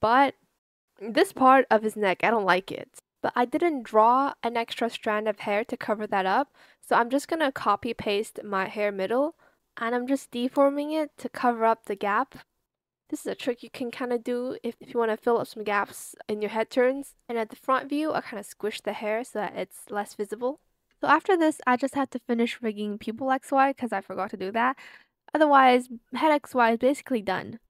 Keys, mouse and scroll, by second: 5.3 ctrl+c, 5.4 ctrl+v, 12.1 b, 12.3 click, 16.7 alt+click, 17.3 shift+click, 17.8 ctrl+z, 21.1 ctrl+z, 26.5 space.